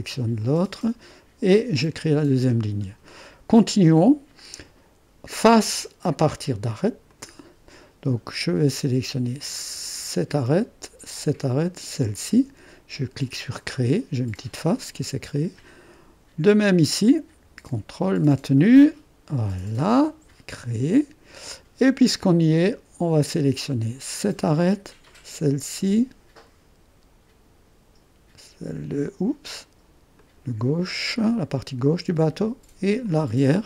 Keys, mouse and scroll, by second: 0.5-1.5 drag, 1.8-3.1 drag, 7.1-8.5 drag, 9.6-10.8 drag, 11.2-12.8 drag, 17.5-21.5 drag, 21.5-23.7 middle drag, 23.7 click, 25.4 click, 30.3-31.4 drag, 33.1 click.